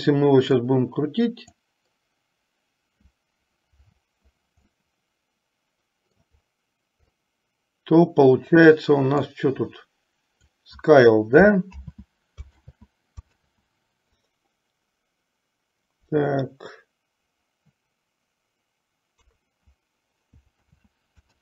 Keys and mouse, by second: 0.8 click, 1.0 click, 4.9-6.4 middle drag, 7.4-8.8 middle drag, 9.4 click, 9.7-10.8 drag, 11.9 ctrl+z, 12.8 ctrl+z, 19.3 KP_3, 20.8 ctrl+z.